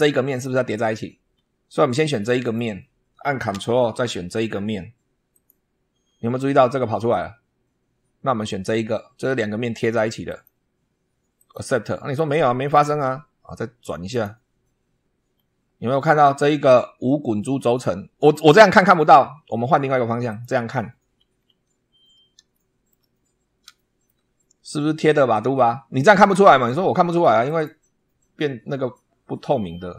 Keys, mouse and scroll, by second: 1.2 scroll down 1, 2.3 click, 5.2 ctrl+click, 10.2 click, 11.3 click, 12.5 click, 14.0 click, 15.2 scroll down 1, 15.9-17.9 middle drag, 20.2 click, 21.0 scroll down 1, 22.4 shift+middle click, 23.6 shift+middle click, 24.2 shift+scroll up 2, 27.4 click.